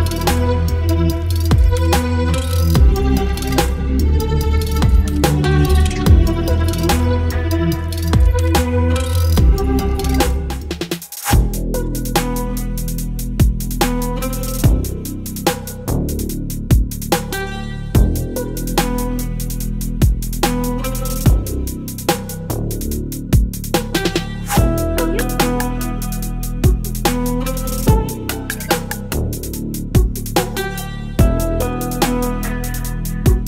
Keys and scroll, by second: 12.1 Delete, 12.7 x, 13.1 Delete, 24.2 Delete, 25.0 ctrl+d, 26.3 space, 27.1 v, 31.3 space, 33.1 space.